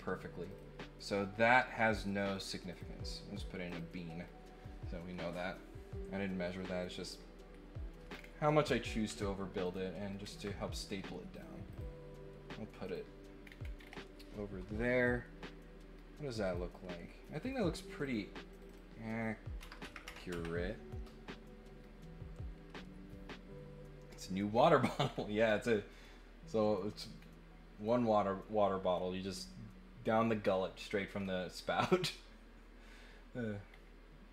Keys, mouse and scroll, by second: 0.5 click, 2.7 click, 3.6 click, 8.1 scroll down 4, 9.6 click, 10.3 ctrl+click, 11.3 click, 11.7 click, 12.8 click, 13.4 scroll down 4, 13.7 scroll up 2, 16.5 right click, 17.4 click, 18.0 click, 18.5 click, 18.6 click, 24.5 scroll down 2, 25.0 scroll up 1, 27.1 scroll down 1, 31.1 scroll up 1, 32.0 scroll up 1, 33.7 scroll up 1.